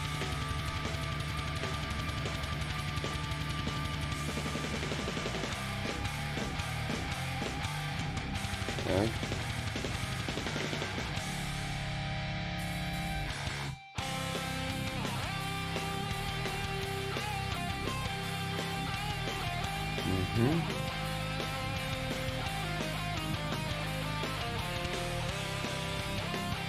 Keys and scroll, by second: 0.3 ctrl+z.